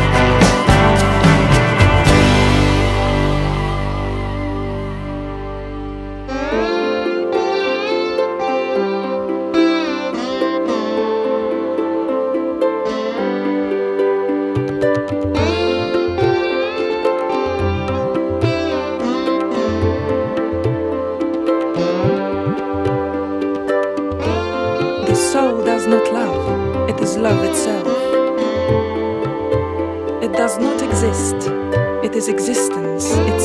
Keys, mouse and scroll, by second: 0.9 click, 3.4 click, 7.2 shift+click, 11.6 click, 14.7 shift+click, 22.3 click, 26.7 ctrl+z, 28.4 click, 29.1 click, 30.6 click, 31.6-32.8 drag.